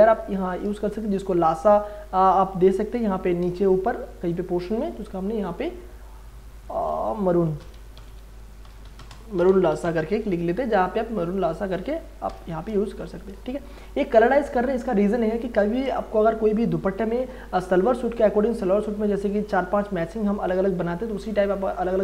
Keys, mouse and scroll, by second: 0.8 space, 1.1-3.5 ctrl+drag, 3.5 space, 3.7-6.6 ctrl+drag, 7.4-10.4 typing, 11.3 click, 12.2 alt+BackSpace, 12.9 ctrl+d, 13.4 space, 13.9-22.0 ctrl+drag.